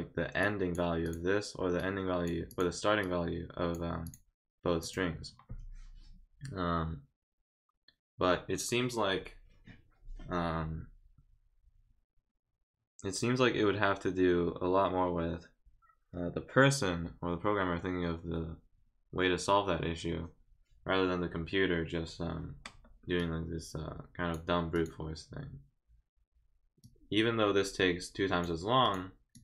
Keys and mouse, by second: 0.4 click, 1.0 click, 1.8 click, 2.5 click, 3.0 click, 4.0 click, 4.8 click, 23.2-24.3 drag, 24.7 click, 26.8-28.4 drag, 28.8 click, 29.3 click.